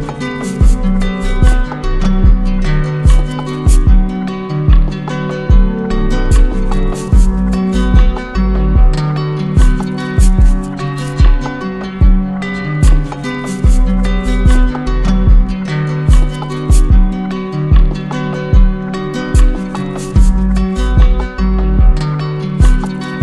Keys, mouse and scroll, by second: 1.0 right click, 3.2 alt+click, 5.3 click, 6.0 ctrl+z, 7.3 ctrl+z, 9.6 alt+click, 10.8 click, 11.2 right click, 13.8 click, 13.9 click, 15.3 click, 17.2 click, 19.1 click, 20.7 click, 22.1 alt+click.